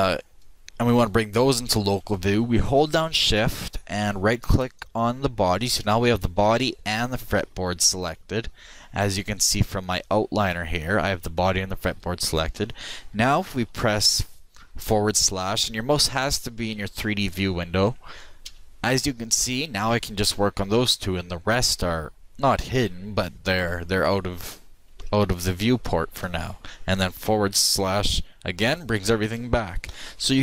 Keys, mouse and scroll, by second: 6.5-9.0 shift+middle drag, 10.0-14.7 drag, 18.5 KP_Divide, 21.7 middle click, 23.4-26.7 middle drag, 27.6 shift+KP_Divide, 29.4-30.4 shift+middle drag.